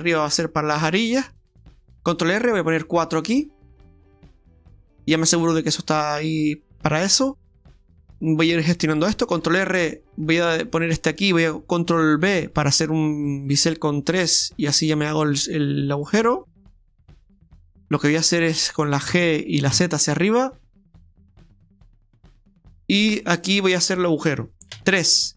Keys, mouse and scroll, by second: 2.0 ctrl+r, 5.4 middle click, 9.3 ctrl+r, 12.2 ctrl+r, 12.2 ctrl+b, 19.1 g, 22.5 middle click, 24.7 KP_3.